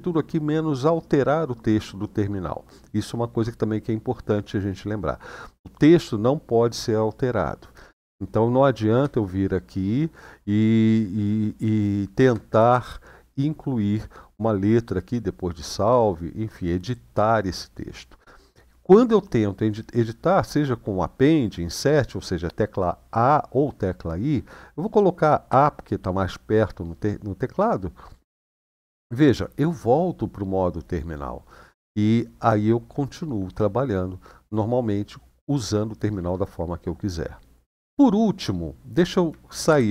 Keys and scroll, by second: 8.8 Right, 9.4-11.9 Right, 12.4 Right, 25.3 a, 39.5 ctrl+d.